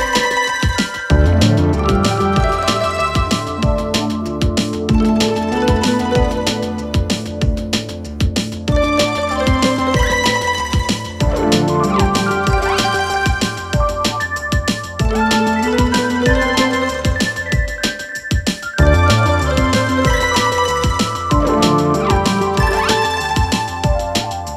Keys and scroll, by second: 0.9 ], 1.6 ], 8.8 ], 19.0 ], 21.4 ].